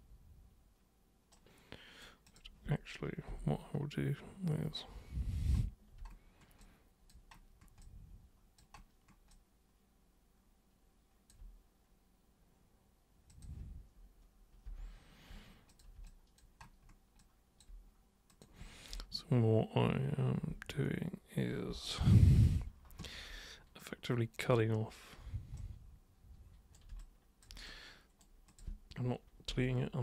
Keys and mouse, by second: 1.3 super+right click, 2.2 super+click, 3.3 super+', 6.6 alt+super+click, 7.8 alt+super+click, 9.3-11.2 alt+super+drag, 13.3 super+click, 15.7 super+click, 16.0 alt+super+click, 17.2-17.6 alt+super+drag, 18.3 super+click, 23.8 alt+super+click, 25.6-26.8 super+right drag, 27.0 alt+super+click, 27.6 super+right click, 28.5 super+click.